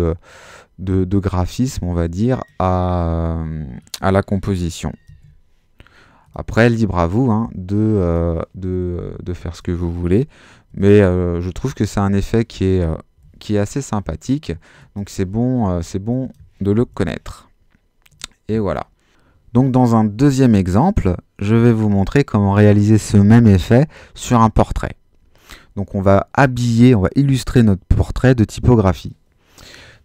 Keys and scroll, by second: 4.8-5.7 typing, 10.4-11.2 typing, 13.2 super+z, 16.5-17.3 typing.